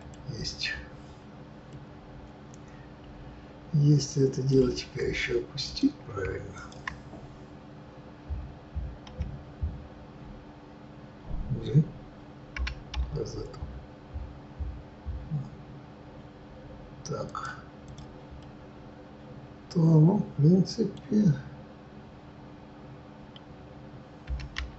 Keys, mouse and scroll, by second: 0.4-1.4 scroll down 5, 1.4-5.7 middle drag, 5.7 click, 9.1 KP_1, 12.6 g, 17.7 click, 18.3-24.7 middle drag.